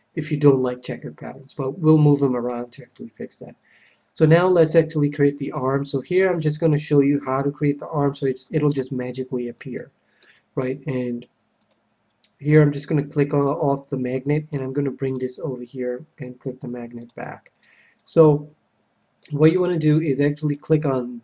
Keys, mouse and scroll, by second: 3.9 middle click, 4.4 a, 4.6 a, 5.5 c, 7.3-8.9 right drag, 7.8-11.4 middle drag, 11.6-13.3 drag, 14.2-16.0 drag, 16.9-18.6 drag, 19.1-20.7 middle drag.